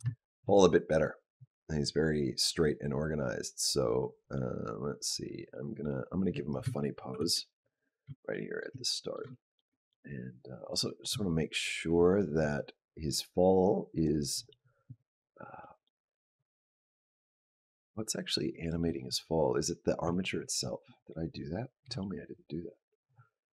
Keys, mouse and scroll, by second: 0.0 shift+middle click, 1.3 click, 7.0 shift+Down, 8.1 shift+middle click, 8.6 middle click, 9.2 shift+middle click, 10.0 middle click, 10.4 click, 13.8 click, 15.4 middle click, 16.3 click, 19.8 Tab, 21.6 KP_Decimal.